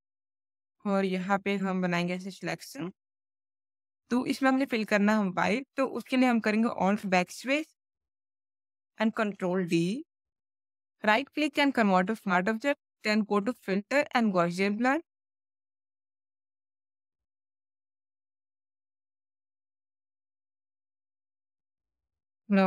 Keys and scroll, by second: 6.8 alt+BackSpace, 9.1 ctrl+d, 21.6 space.